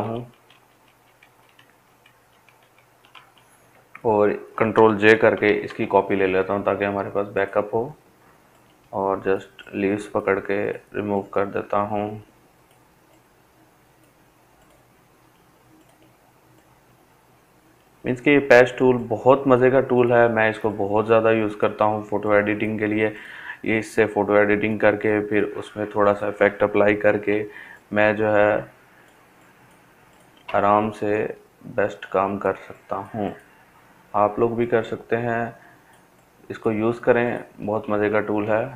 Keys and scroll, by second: 2.8 ctrl+j, 24.5 ctrl+d, 36.5 ctrl+space.